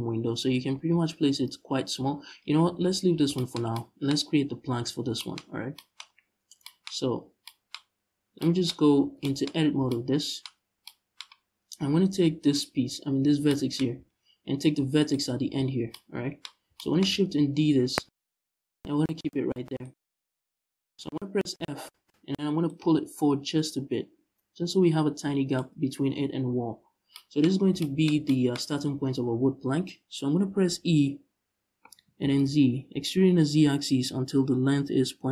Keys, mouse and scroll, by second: 0.0-1.8 scroll up 1, 1.8 scroll down 1, 2.1-2.4 scroll up 1, 2.4 Tab, 2.8 scroll down 1, 4.3-4.8 scroll up 1, 5.9-6.3 scroll up 1, 6.8 scroll down 1, 7.8 scroll down 1, 8.4 scroll up 1, 8.6 Tab, 9.2-9.5 scroll up 1, 10.2 scroll down 1, 12.1 right click, 13.6 z, 14.0-14.6 scroll up 1, 14.6 shift+right click, 15.1 z, 15.4 scroll down 1, 16.1 scroll up 1, 17.7 shift+d, 19.6 right click, 20.2-20.5 scroll up 1, 21.2 f, 22.3-35.3 drag, 26.4-26.8 scroll down 1, 31.6 f.